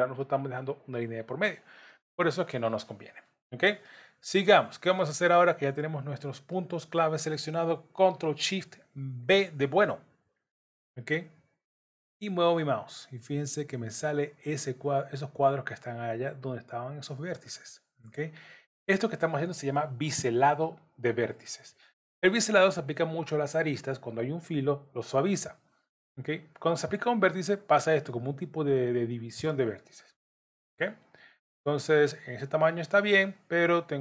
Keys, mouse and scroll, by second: 1.9 middle click, 3.8 middle click, 9.2 ctrl+shift+b.